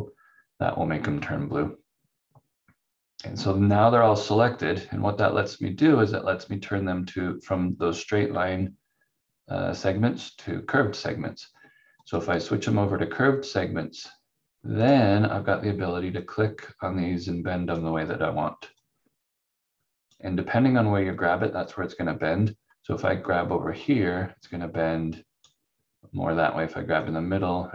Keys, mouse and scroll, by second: 12.0 click, 23.8 click.